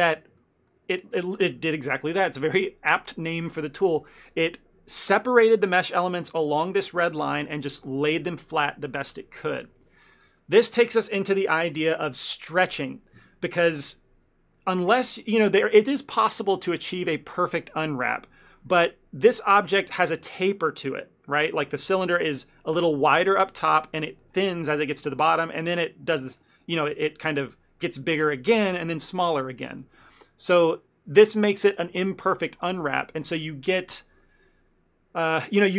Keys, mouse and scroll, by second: 0.2 shift+middle click, 0.5 ctrl+middle click, 19.4 middle click, 25.6 middle click, 26.5 middle click.